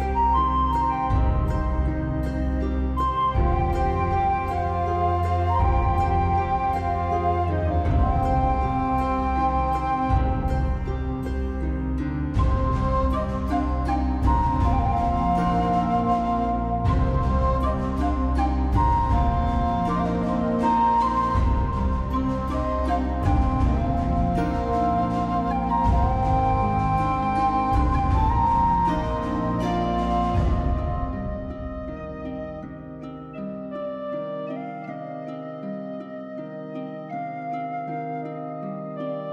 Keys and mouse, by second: 0.5 shift+middle click, 2.0 Tab, 2.1 shift+middle click, 2.3 alt+z, 2.7 click, 3.5 shift+middle click, 4.0 g, 4.9 click, 5.2 g, 5.9 click, 6.1 Tab, 6.3 alt+middle click, 6.5 alt+z, 6.6 middle click, 7.2 alt+middle click, 7.4 alt+middle click, 7.6 shift+middle click, 8.0 ctrl+s, 8.6 middle click, 9.4-11.7 typing, 10.7 click, 11.1 click, 11.6 click, 14.1 Tab, 14.2 ctrl+r, 14.7 Tab, 14.7 ctrl+r, 14.9 middle click, 15.1 ctrl+r, 15.8 right click, 16.3 x, 16.6 click, 16.9 x, 17.6 alt+z, 17.7 click, 17.8 x, 18.3 alt+middle click, 18.4 alt+middle click, 18.8 middle click, 19.9 alt+click, 20.4 alt+click, 20.6 alt+middle click, 20.7 alt+middle click, 21.0 alt+middle click, 21.2 shift+middle click, 21.5 g, 21.7 click, 22.0 click, 22.2 g, 22.5 click, 22.8 click, 22.9 g, 23.2 click, 23.5 g, 23.9 click, 24.2 alt+middle click, 24.4 alt+middle click, 24.9 click, 25.1 shift+middle click, 25.5 r, 25.7 click, 25.7 g, 26.2 click, 27.3 ctrl+r, 27.8 click, 28.1 click, 28.5-33.5 typing, 28.7 click, 29.2 click, 29.4 click, 30.0 click, 30.3 click, 31.0 click, 31.3 click, 31.8 click, 32.3 click, 32.9 click, 33.3 click, 33.8 click, 34.0 alt+middle click, 34.5 alt+middle click, 34.9 click, 35.1 alt+middle click, 35.3 s, 35.6 click, 36.6 g, 37.1 click, 37.5 g, 37.6 middle click, 38.0 click, 38.4 middle click, 38.9 click, 39.1 click, 39.2 middle click.